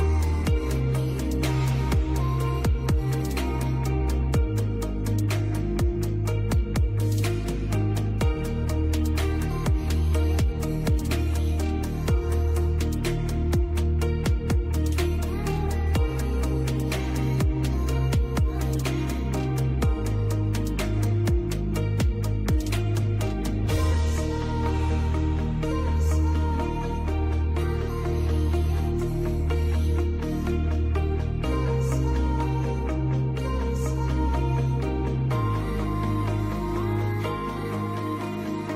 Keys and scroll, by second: 3.5 ctrl+q, 7.9 space, 22.4 space, 27.4 shift+Page_Up, 28.9 Escape, 30.6 shift+Page_Up, 34.6 Escape, 36.7 shift+Page_Up, 38.0 Escape.